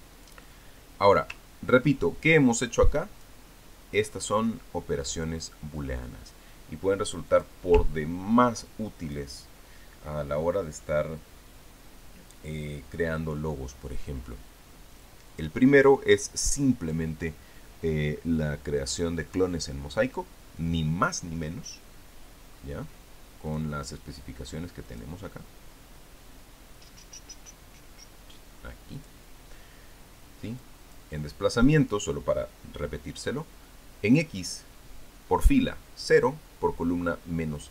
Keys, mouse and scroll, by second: 0.4 click, 3.2 click, 5.0-7.3 drag, 8.1 click, 8.6-10.4 ctrl+drag, 16.2 click, 16.7-18.0 drag, 23.3 scroll up 2, 24.3 click, 25.7 click, 29.8 click, 31.4 click, 32.4 click.